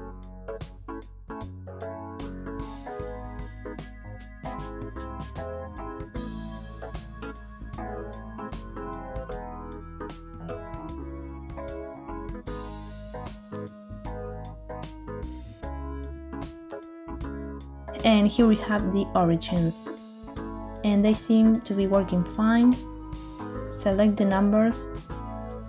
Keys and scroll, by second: 8.7 shift+space, 16.6 shift+space, 22.2 s, 23.0 Escape.